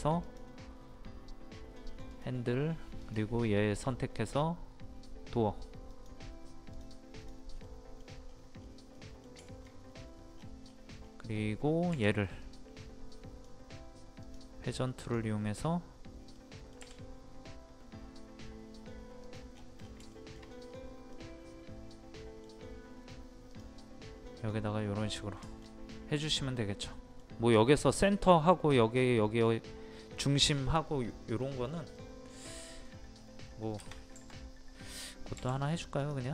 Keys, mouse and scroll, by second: 7.7 middle click, 8.3-8.6 scroll up 1, 9.0 middle click, 9.5 shift+middle click, 9.9 scroll up 1, 10.4 scroll down 1, 11.9 scroll up 1, 11.9 q, 12.4-13.6 drag, 16.4 middle click, 19.3 click, 19.5 scroll down 1, 19.6 scroll up 1, 19.8 scroll down 1, 20.1 shift+middle click, 20.7 scroll up 1, 21.2 middle click, 23.5 click, 23.8-31.8 middle drag, 31.8 scroll down 1, 32.0 middle click, 33.2 scroll up 1, 36.0 click.